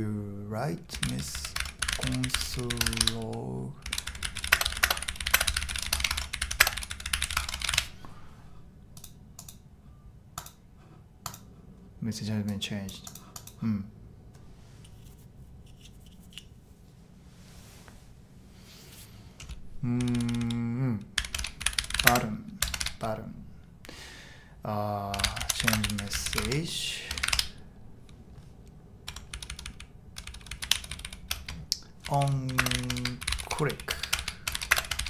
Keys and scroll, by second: 0.6-8.1 typing, 19.9-23.1 typing, 24.9-27.3 typing, 27.3 Return, 29.1 Tab, 29.3-35.0 typing.